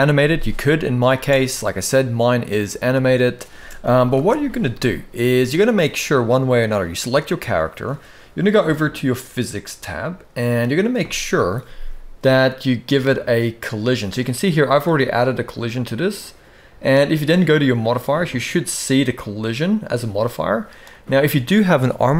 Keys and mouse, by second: 0.9 space, 3.2 space, 3.9 shift+Left, 4.9 shift+middle drag, 6.5 click, 9.7 click, 19.5-20.5 drag.